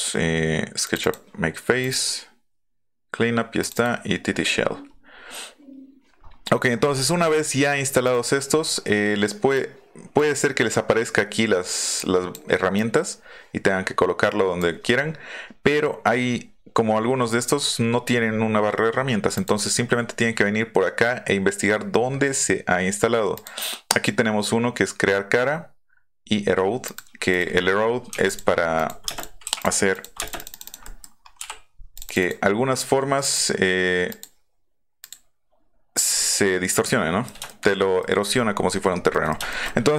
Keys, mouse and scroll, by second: 3.6 click, 4.6-5.1 scroll down 1, 6.2 scroll down 2, 6.6 scroll up 2, 6.8-7.3 scroll down 4, 7.3 scroll up 2, 8.0 click, 9.5-10.1 drag, 11.9 click, 12.7 click, 19.3 click, 23.3 click, 26.8 click, 27.3 click, 28.3 click, 28.7 click, 29.9 click, 30.2 click, 30.2 space, 30.3 click, 30.5 click, 30.8 middle click, 31.2-31.7 scroll up 2, 31.9 click, 33.2 click, 34.1 click, 35.0 click, 35.9 click, 36.2-37.2 middle drag, 37.4-38.0 shift+middle drag, 39.1 middle click, 39.5 shift+middle click.